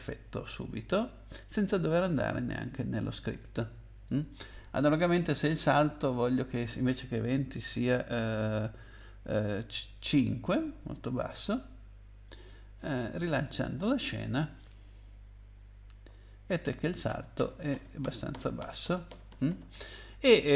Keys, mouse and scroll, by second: 1.8 Up, 2.4 Down, 2.9 Up, 4.0 click, 5.6 click, 6.1 click, 10.1 5, 11.2 Tab, 13.2 click, 16.0-19.1 typing.